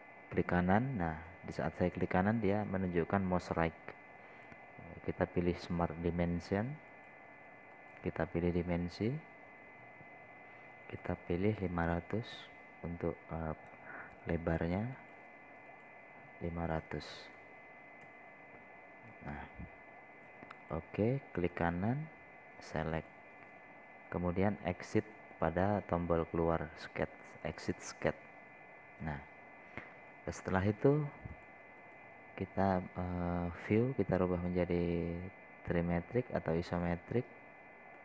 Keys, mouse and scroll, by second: 1.3 right click, 7.2 click, 12.5 KP_5, 12.8 KP_0, 16.4 click, 18.3 KP_5, 18.6 KP_0, 20.6 scroll up 1, 21.2 scroll up 1, 21.4 scroll down 1, 22.1 click, 22.8 right click, 24.5 click, 30.4 scroll up 1, 30.8-31.8 scroll down 1, 31.8-37.1 drag, 37.1 scroll down 1, 37.5 scroll up 2.